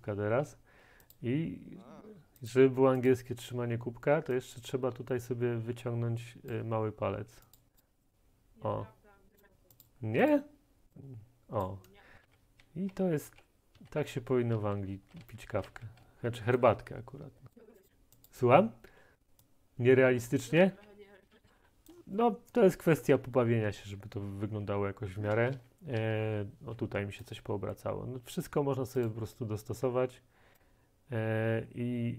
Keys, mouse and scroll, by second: 6.5 middle click, 7.6 click, 7.8 click, 9.4 click, 9.9 click, 10.4 click, 11.6 click, 12.2-16.1 typing, 16.6 right click, 20.3 click, 20.7-26.5 typing, 22.0-27.0 drag, 27.3 middle click.